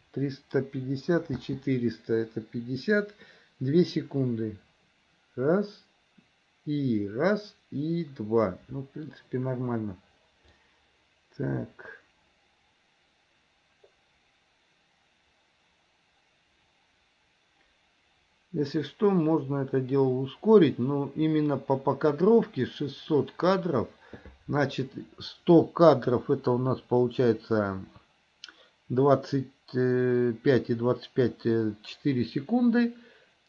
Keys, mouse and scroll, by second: 1.4 space, 10.7-23.8 drag.